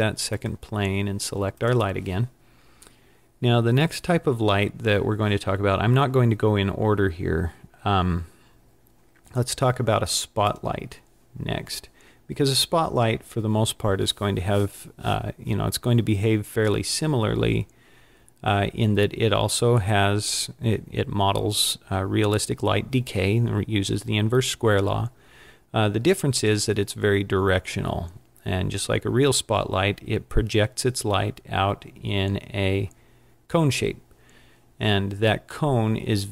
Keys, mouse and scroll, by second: 1.6 click, 10.5 click, 35.8 middle click.